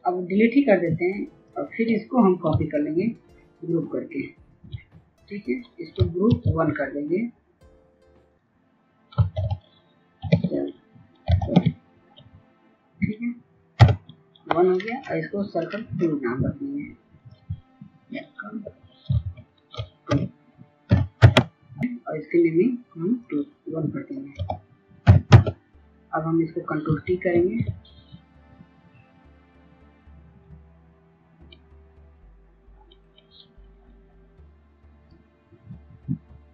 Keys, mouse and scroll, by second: 2.4 ctrl+click, 6.1 ctrl+g, 8.0 click, 9.1-11.8 typing, 15.5 right click, 16.9 click, 18.4 Right, 18.9 ctrl+shift+Left, 19.8 BackSpace, 20.6 KP_2, 21.8 click, 24.8 KP_1, 26.1 click, 27.1 ctrl+t, 28.6-36.5 drag.